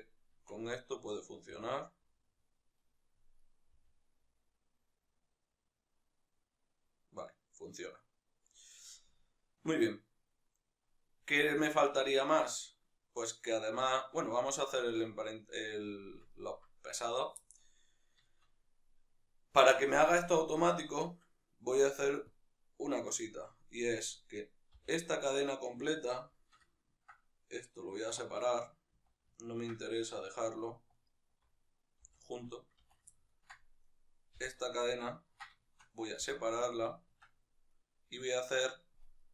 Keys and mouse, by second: 0.5 right click, 1.3 g, 3.1 right click, 3.5 g, 8.1 right click, 8.9-16.7 ctrl+middle drag, 16.7-17.1 right drag, 17.1-23.2 shift+middle drag, 23.2 Tab, 23.7 right click, 24.4 l, 26.1-30.6 shift+middle drag, 28.8 z, 30.6 alt+right click, 31.8 v, 32.6 z, 32.8-33.6 ctrl+middle drag, 33.6 right click, 34.1 l, 34.7-37.5 ctrl+middle drag, 36.5 p, 37.0 Tab, 37.5-39.3 right drag.